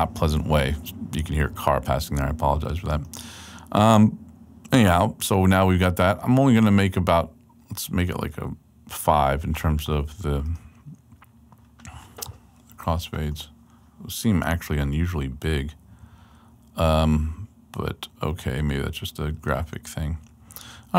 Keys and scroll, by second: 15.2 super+Right, 20.0 super+Right.